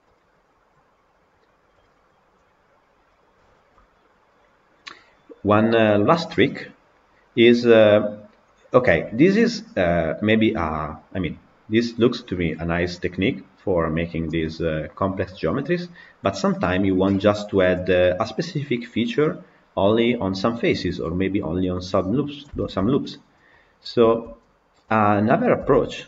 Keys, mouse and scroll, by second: 0.1 click, 1.7 click, 3.1 click, 6.5 click, 8.8 click, 14.3-23.6 middle drag, 23.6 click, 24.2 Tab, 25.5 KP_Decimal.